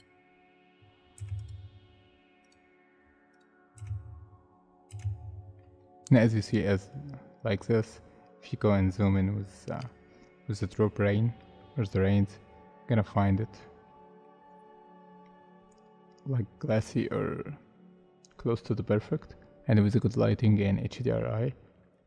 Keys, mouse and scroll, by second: 1.1 space, 3.8 space, 4.5-4.9 scroll up 1, 4.9 space, 5.6 middle click, 8.2-8.6 scroll up 1, 9.0 middle click, 21.5 scroll down 1, 21.9 middle click.